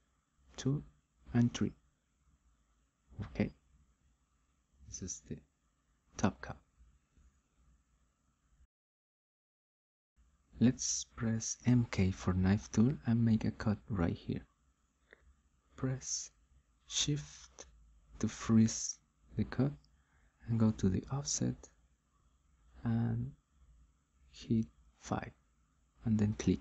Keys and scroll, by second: 10.5-11.4 typing, 25.0 5.